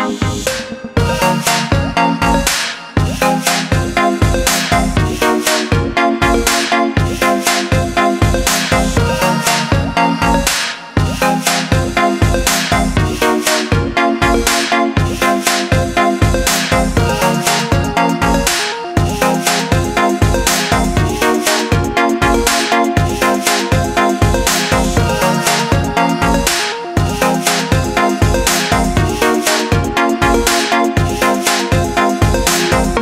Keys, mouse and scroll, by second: 7.1 click, 12.3 shift+click, 13.7 click, 22.5 shift+click, 26.5 click.